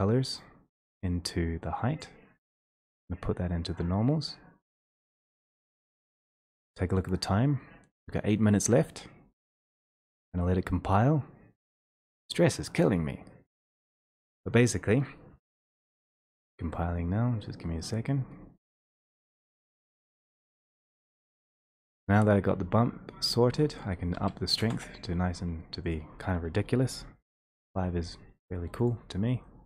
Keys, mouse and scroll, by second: 2.0 click, 2.0 scroll, 23.8 click, 24.2 3, 24.6 Return, 25.9 click, 27.3 5, 27.4 Return, 29.0 click.